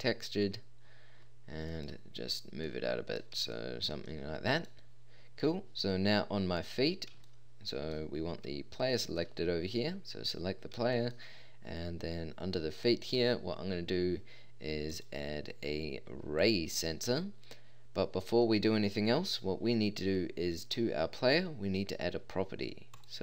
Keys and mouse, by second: 4.1 middle click.